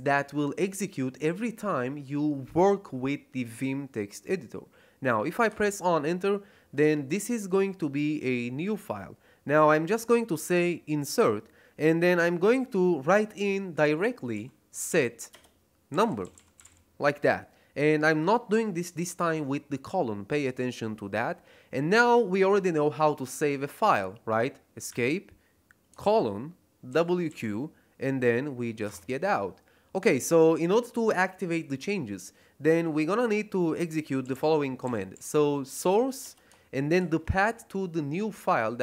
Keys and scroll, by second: 5.4 Return, 14.0-17.1 typing, 24.8 Escape, 26.0 shift+;, 26.8 w, 27.2 q, 28.8 Return, 33.9-36.9 typing.